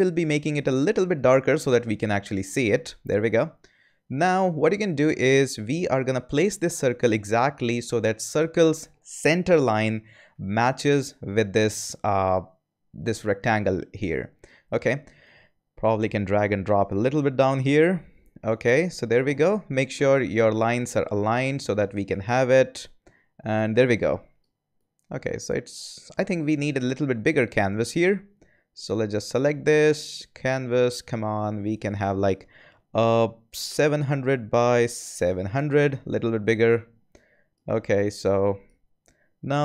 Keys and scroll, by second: 33.2-35.6 typing.